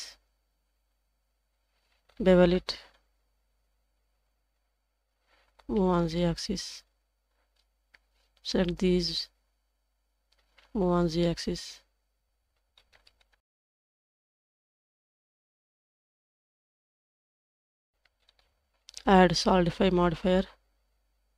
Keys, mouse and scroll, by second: 0.5 s, 5.3 g, 7.6 scroll down 2, 8.0 alt+z, 8.5-9.8 drag, 10.4 g, 12.6 alt+z, 12.7 scroll up 2, 13.1 shift+middle click, 13.4 alt+z, 14.4 alt+click, 14.8 scroll up 1, 15.4 ctrl+b, 17.5 scroll down 1, 17.7 Tab, 18.1 alt+z, 18.2-19.8 alt+scroll down 5, 18.4-18.7 middle drag, 19.8 scroll down 1, 20.3 click.